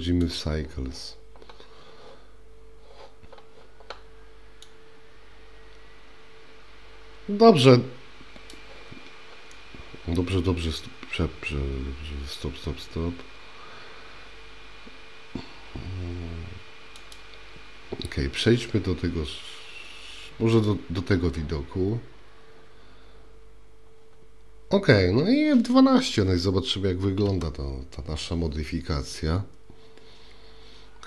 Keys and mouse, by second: 4.8-11.4 drag, 27.6 F12.